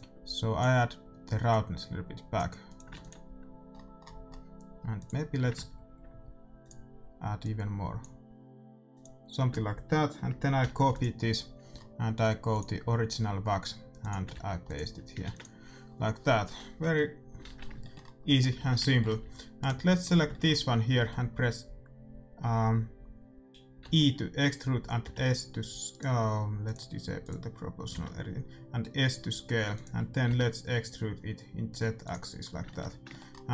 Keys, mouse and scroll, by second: 2.9 ctrl+s, 4.2-6.1 middle drag, 7.4-10.8 drag, 11.9 middle click, 12.5-15.7 drag, 15.2 ctrl+s, 15.8-18.5 middle drag, 17.4 shift+z, 18.5 Tab, 19.2 a, 19.5-21.5 right drag, 23.8 e, 25.0 s, 26.6-28.5 drag, 27.9 s, 30.2 e, 32.4-33.5 middle drag.